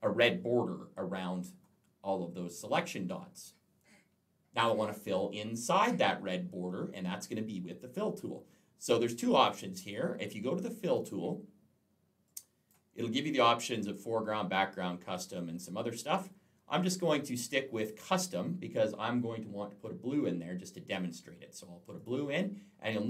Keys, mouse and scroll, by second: 1.6-2.4 alt+scroll down 1, 2.4-3.4 alt+scroll down 1, 9.3 click, 10.8 click, 12.1 click, 13.1 click, 17.8 click, 21.8 click.